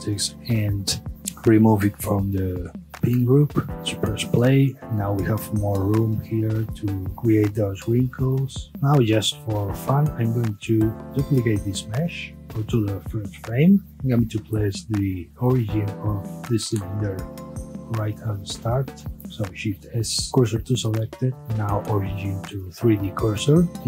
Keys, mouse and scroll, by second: 1.1 click, 1.9-3.4 drag, 3.4 Tab, 8.7-10.2 scroll down 1, 10.2-11.2 shift+middle drag, 11.2 shift+d, 12.4 click, 13.2-13.8 drag, 13.8 Tab, 14.2-14.8 scroll up 1, 14.8 alt+click, 15.5-18.5 middle drag, 19.1 shift+s, 20.8 middle click, 21.4-23.7 right drag, 23.7 middle click.